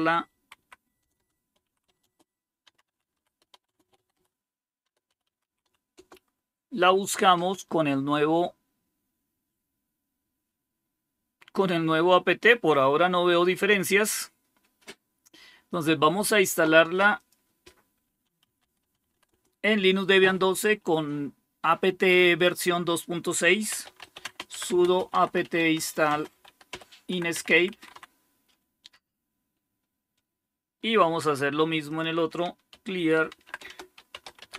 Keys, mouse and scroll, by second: 0.0-6.0 typing, 11.2-14.3 scroll up 2, 14.3-14.7 scroll up 1, 14.7-17.0 scroll down 1, 17.0 click, 18.3-19.5 typing, 23.4-28.3 typing, 31.8 click, 32.4-34.5 typing.